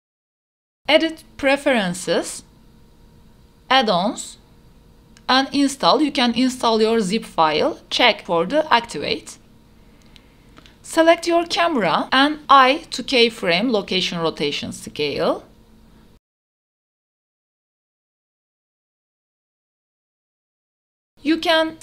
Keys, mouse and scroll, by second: 1.1-2.3 drag, 10.2 i, 11.7 click, 12.3-15.3 drag, 16.0 click, 17.7 q, 20.6 i.